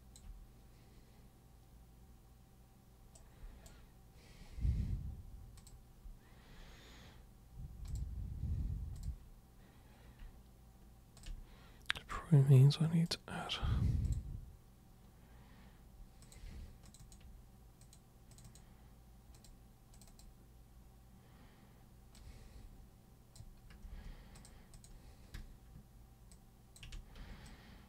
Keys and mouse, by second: 3.1 super+right click, 5.5 super+click, 7.9 super+click, 8.9 super+click, 11.2 ctrl+super+click, 12.1 super+right click, 14.0 super+click, 16.2 super+click, 16.9 ctrl+shift+super+click, 17.8 ctrl+shift+super+click, 18.3 ctrl+shift+super+click, 19.3 ctrl+shift+super+click, 19.9 ctrl+shift+super+click, 20.1 shift+click, 22.1-23.3 shift+drag, 24.3 click, 24.7 click, 26.3 shift+click, 27.4 alt+super+click.